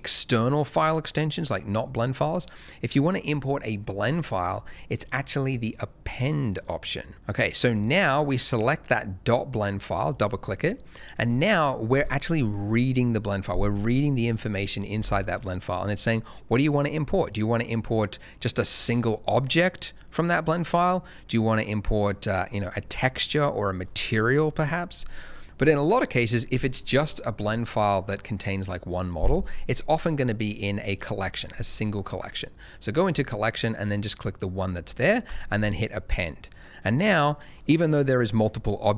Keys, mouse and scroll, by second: 6.7 click, 7.6 click, 10.1 double click, 18.7 click, 18.8 double click, 20.4 click, 22.5 double click, 23.1 click, 23.6 double click, 24.3 click, 30.8 click, 30.9 double click, 33.1 click, 36.5 middle click, 37.3 shift+middle click.